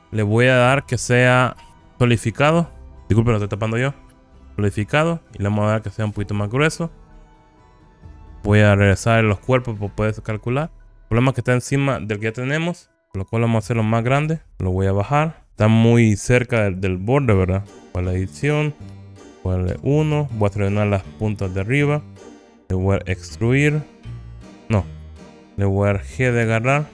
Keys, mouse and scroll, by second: 0.0-4.8 drag, 6.1-8.2 drag, 10.7 click, 11.3 middle click, 13.0 click, 13.1-13.7 scroll up 2, 14.3 s, 14.5 click, 15.5 g, 15.5 z, 17.7 Tab, 19.8 1, 20.4-22.1 drag, 23.2 e, 25.2 Escape, 26.5 g.